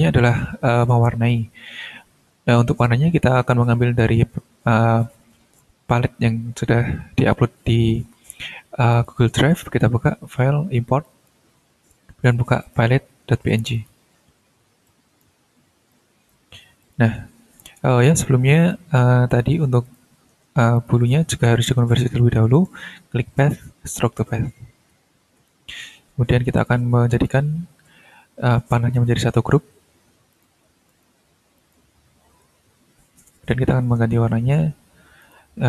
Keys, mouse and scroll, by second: 8.9 click, 11.0 click, 12.6 click, 13.6 click, 14.8 click, 15.5 scroll down 1, 15.9-16.5 drag, 16.8 click, 17.2-17.6 shift+scroll down 2, 17.8-18.2 ctrl+shift+scroll up 3, 18.7-19.1 drag, 19.3 click, 19.8 shift+click, 20.7 shift+click, 21.2 ctrl+shift+scroll up 2, 22.5 click, 23.9 click, 25.0 ctrl+scroll down 2, 25.6-26.8 ctrl+scroll up 6, 27.1 shift+click, 28.1 ctrl+shift+scroll down 3, 28.6-29.6 ctrl+scroll up 3, 30.3 shift+click, 30.9 shift+right click, 31.6 click, 32.1-33.1 ctrl+scroll down 6, 33.1 ctrl+scroll up 2, 35.2 click.